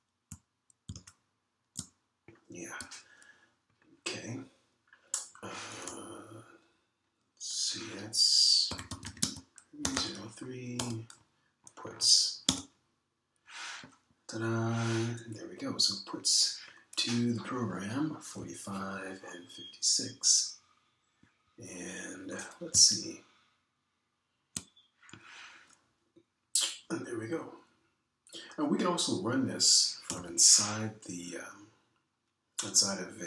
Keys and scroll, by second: 0.6 super+Tab, 1.8 super+Tab, 9.4-13.9 typing, 31.1 ctrl+[.